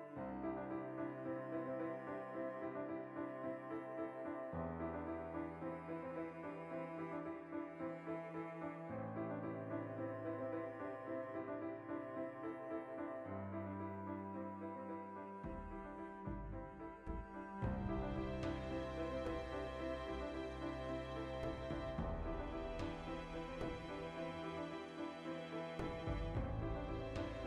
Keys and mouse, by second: 1.0 2, 1.3 alt+right click, 1.7 alt+q, 1.9-3.2 ctrl+shift+middle drag, 2.6 e, 3.2 click, 3.5 alt+q, 4.0-5.7 ctrl+shift+middle drag, 5.1 1, 5.4 z, 5.7 right click, 6.0-8.1 middle drag, 6.6 z, 7.2 z, 7.9 2, 8.1 alt+right click, 8.4-15.5 middle drag, 9.3 ctrl+x, 11.0 alt+shift+right click, 12.4 ctrl+x, 13.7 z, 14.4 1, 15.5 shift+right click, 16.4 z, 16.5 middle click, 17.0 z, 17.7 g, 19.0 click, 19.6 g, 20.4 right click, 20.6 z, 21.3 ctrl+z, 22.1 g, 22.9 click, 23.4 z, 23.7 middle click, 24.3 shift+right click, 24.8 z, 25.0 middle click, 25.2 g, 26.1 click, 26.2 z, 26.5 shift+right click, 27.1 z, 27.3 g.